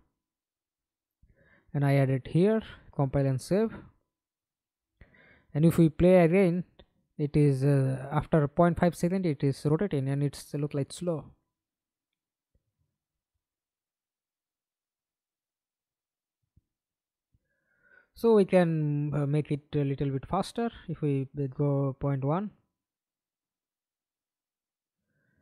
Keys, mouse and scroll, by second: 2.5 double click, 3.8 middle click, 4.6 F11, 5.0 alt+p, 6.7 a, 7.3-8.1 w, 14.7 Escape, 14.9 middle click, 15.8 F11, 19.2 ., 19.5 1, 21.7 double click, 22.2 double click, 23.2 middle click, 23.3 F11, 23.7 alt+p, 24.9 w, 25.3-25.4 a.